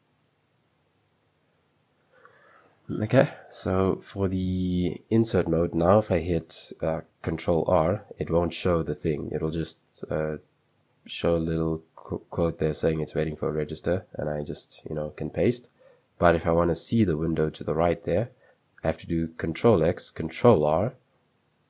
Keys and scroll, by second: 0.0-1.4 typing, 4.2-5.0 typing, 7.6 ctrl+r, 13.7 typing, 15.1 Escape, 15.4 u, 16.5 i, 19.5 ctrl+x, 20.2 ctrl+r.